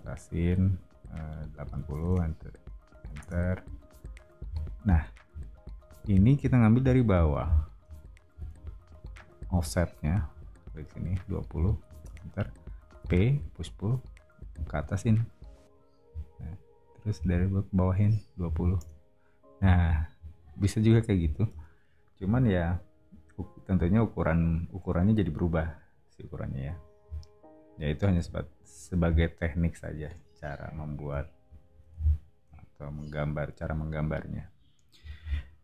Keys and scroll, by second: 1.3-2.3 typing, 3.2 Return, 4.4 o, 8.3 space, 9.4 f, 11.2-13.0 typing, 18.1-19.5 typing.